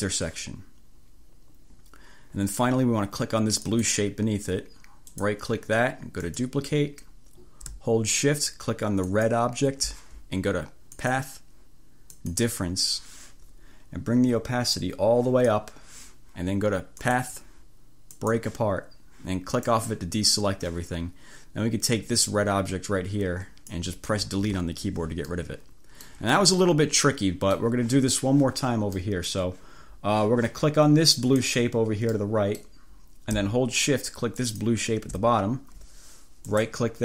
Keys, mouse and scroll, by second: 3.7 click, 5.2 right click, 6.3 click, 9.1 shift+click, 11.1 click, 12.2 click, 14.8-15.8 drag, 17.0 click, 18.2 click, 19.6 click, 22.3-24.0 drag, 24.6 Delete, 25.4 click, 26.4 click, 27.5 click, 29.1 click, 31.4 click, 32.6 click, 34.5 shift+click, 36.6 click.